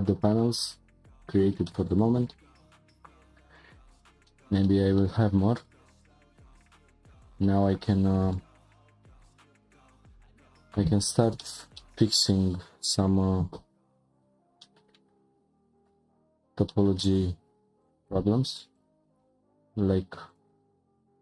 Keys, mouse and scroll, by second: 1.6-2.4 middle drag, 2.4-2.8 scroll up 3, 3.9 scroll down 2, 4.3-5.4 shift+middle drag, 5.4 scroll up 4, 6.1 click, 7.3 scroll down 2, 7.6 click, 8.3-10.9 shift+middle drag, 10.9 Tab, 11.4-12.2 shift+middle drag, 12.2-12.6 scroll up 2, 13.5 2, 14.1 click, 14.6-15.7 shift+middle drag, 15.7 ctrl+click, 17.8 shift+click, 18.7 ctrl+click, 20.3 shift+click.